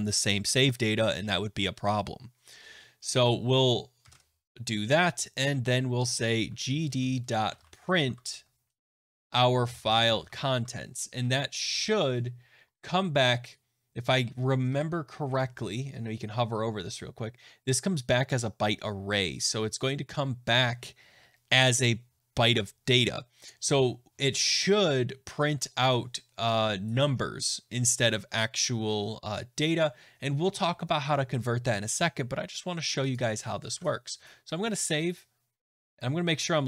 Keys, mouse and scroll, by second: 3.2 click, 4.0 Return, 6.0-12.4 typing, 12.5 click, 12.6 click, 14.6-15.7 typing, 33.0 click, 33.6 ctrl+s.